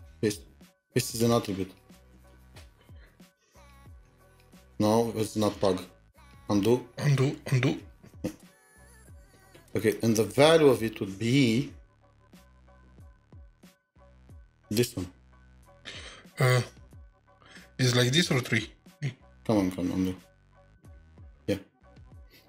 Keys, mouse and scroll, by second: 0.1 typing, 4.0-5.5 typing, 7.4 typing, 7.8 ctrl+z, 8.8 typing, 12.4 typing, 14.0 typing, 18.2 BackSpace, 20.1-20.4 typing, 21.5-22.3 typing.